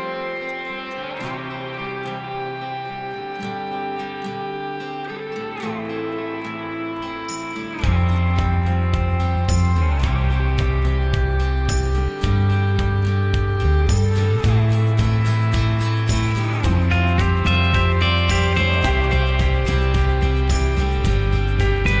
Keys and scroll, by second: 4.7 ctrl+s, 9.2 l, 11.0 p, 12.4 Escape, 15.4-16.3 typing.